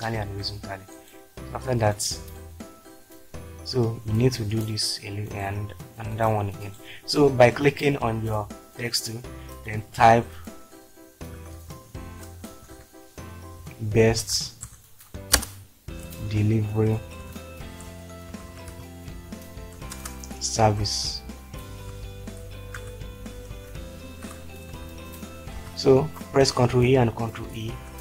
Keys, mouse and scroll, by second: 1.8 click, 2.6 click, 11.3-12.5 typing, 13.6-14.6 typing, 15.4 Return, 16.0-18.7 typing, 19.9 Return, 20.8-23.5 typing, 24.7-25.6 typing, 26.7 ctrl+a, 27.1 ctrl+e, 27.9 ctrl+space.